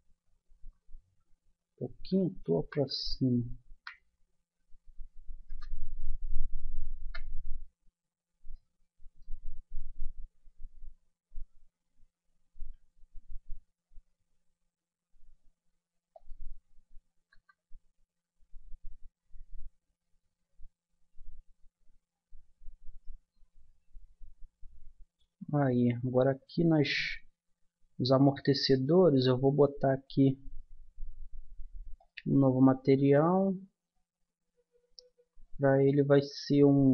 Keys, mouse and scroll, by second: 7.0 KP_0, 10.5 middle click, 12.3 middle click, 12.6 s, 17.3 KP_0, 18.5-20.1 middle drag, 20.4-22.9 middle drag, 22.9-24.6 right drag, 24.8 middle click, 27.4-29.6 middle drag, 32.0-33.6 drag, 33.6 middle click, 35.0-36.9 middle drag.